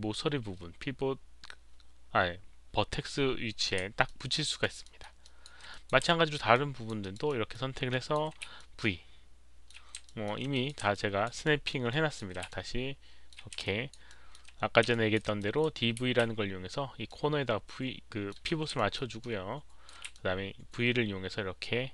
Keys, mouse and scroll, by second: 4.0 alt+drag, 4.4 alt+right click, 4.8 alt+middle click, 5.2 alt+click, 5.7 alt+drag, 6.0 alt+middle drag, 6.5-6.8 alt+drag, 7.0 alt+right drag, 7.2 alt+middle drag, 7.9 alt+click, 7.9 alt+right click, 8.5 v, 8.5-9.6 alt+middle drag, 10.0 alt+middle drag, 10.5 alt+click, 10.9-11.2 alt+drag, 11.4 alt+middle click, 11.9 alt+drag, 11.9 alt+right click, 12.4 v, 12.5-13.3 alt+middle drag, 13.5 v, 13.6 alt+drag, 14.0 alt+middle click, 14.0 v, 14.9 alt+drag, 15.3 drag, 15.6 alt+middle click, 15.6-17.1 typing, 16.6 alt+click, 17.0-18.3 alt+middle drag, 18.3 alt+click, 18.3 v, 18.7 alt+middle drag, 19.2-19.8 alt+drag, 19.8-20.6 typing, 20.1-21.9 alt+middle drag.